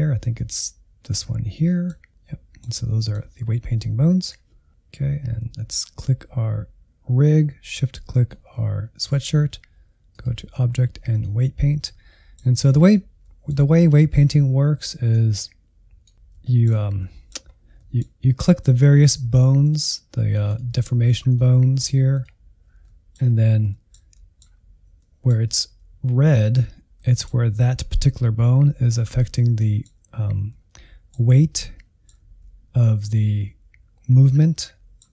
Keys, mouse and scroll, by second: 0.5-1.7 drag, 1.7-3.3 middle drag, 3.3-11.4 drag, 11.4-14.1 middle drag, 14.1-15.2 drag, 15.2 alt+z, 16.1 ctrl+click, 16.4 shift+middle click, 16.7 scroll up 1, 16.9 middle click, 17.4 scroll up 1, 17.7-18.9 middle drag, 18.9 ctrl+click, 19.8 ctrl+click, 21.4 ctrl+click, 22.8 middle click, 23.3-23.7 scroll up 1, 23.7-25.7 shift+middle drag, 25.7 alt+z, 26.9-27.9 middle drag, 27.9 alt+z, 28.6 alt+z, 29.6-32.3 middle drag, 32.3 alt+z, 34.5-35.1 middle drag.